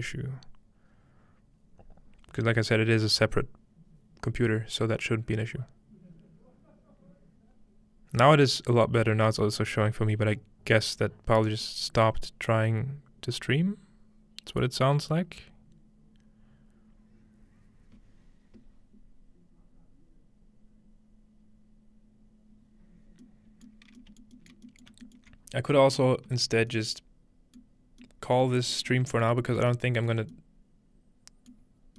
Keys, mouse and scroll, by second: 23.2-23.8 middle drag, 23.8 scroll down 1, 24.9 alt+shift+middle click, 25.3 middle click, 25.4-26.1 scroll up 2, 26.1-27.4 scroll down 1, 27.4-29.7 scroll down 1, 27.8-28.4 shift+middle drag, 28.4 shift+middle click, 28.8 shift+middle drag, 29.3 shift+middle click, 29.7 shift+middle click, 31.8 middle click, 31.8-31.9 scroll down 1.